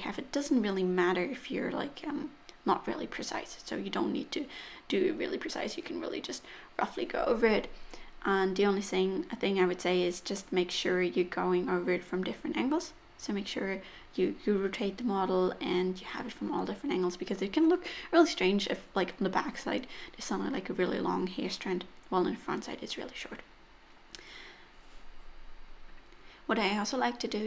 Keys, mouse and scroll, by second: 0.0 click, 0.3 middle click, 0.6 click, 3.3 middle click, 3.7 click, 4.3 middle click, 5.1 click, 5.1 middle click, 5.4 middle click, 5.6 shift+middle click, 6.1-6.8 scroll down 1, 6.8 scroll down 1, 6.9 click, 7.3 middle click, 7.5 click, 7.9 click, 8.1 click, 8.3 click, 8.5 click, 8.8 click, 9.0 click, 9.2 click, 9.5 click, 9.6 middle click, 10.0 click, 10.2 click, 10.5 click, 10.8 middle click, 11.1 click, 11.3 click, 11.7 click, 12.2 click, 12.4 middle click, 12.7 click, 12.9 click, 13.2 click, 13.4 click, 13.5 middle click, 13.8 click, 13.9 click, 14.2 click, 14.3 click, 14.6 click, 14.9 middle click, 15.2 click, 15.4 click, 15.6 click, 15.9 middle click, 17.9 click, 18.2-18.9 scroll down 2, 18.3 middle click, 18.9 middle click, 19.9 middle click, 19.9 scroll up 3, 20.1 shift+middle click, 20.5 click, 20.8 click, 21.0 click, 21.3 click, 21.5 click, 21.8 click, 22.0 click, 22.3 click, 22.5 click, 22.7 click, 22.9 click, 23.2 click, 23.4 click, 23.7 click, 24.0 click, 24.1 middle click, 24.5 click, 24.7 click, 24.9 middle click, 25.2 click, 25.5 click, 25.7 click, 25.9 click, 26.3 click, 26.6 click, 26.9 click, 27.2 click.